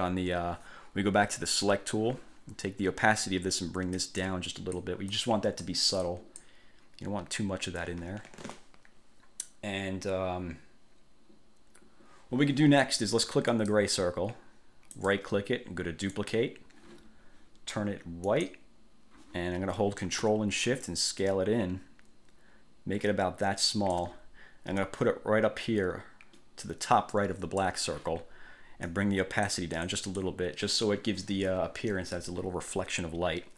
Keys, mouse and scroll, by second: 1.6 click, 3.4-5.1 drag, 5.3 click, 6.2 click, 13.7 click, 15.1 click, 16.3 click, 18.4 click, 21.0-24.3 ctrl+shift+drag, 25.0-28.0 drag, 29.0-29.8 drag, 30.0 click.